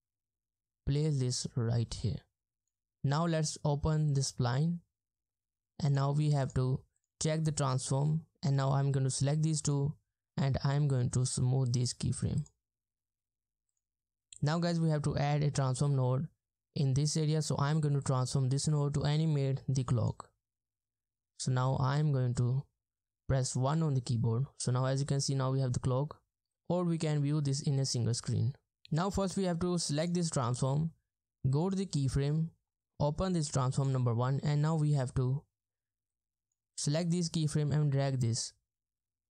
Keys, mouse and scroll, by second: 23.8 1, 25.7-26.2 ctrl+scroll down 1, 26.2-26.6 ctrl+scroll up 1, 28.4-28.7 ctrl+scroll down 1, 34.6-35.3 ctrl+scroll up 2.